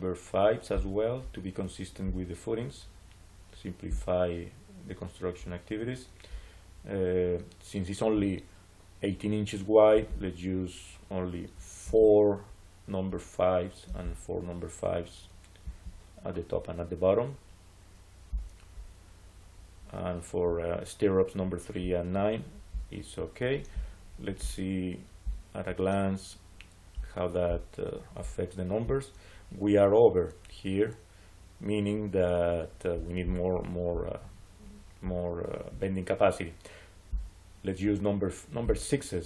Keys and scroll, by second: 11.7 4, 15.5 4.